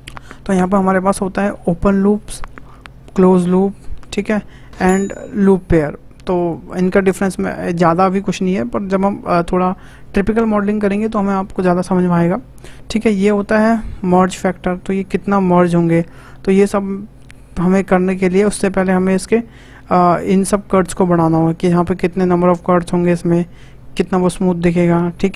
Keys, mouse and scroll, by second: 2.1-9.5 drag, 14.6-16.1 drag, 22.4-25.3 drag.